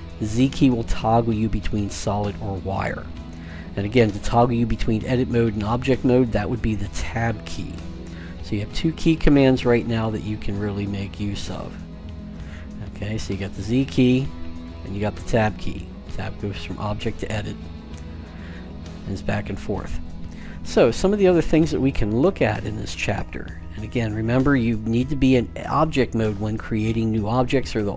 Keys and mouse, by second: 0.0-2.3 typing, 5.9 Tab, 6.7 Tab, 7.4 Tab, 11.4-14.0 typing, 14.5 Tab, 15.0 Tab, 15.4 Tab, 15.9 Tab, 16.8 Tab, 17.5 Tab, 17.9 Tab, 18.6-20.0 middle drag.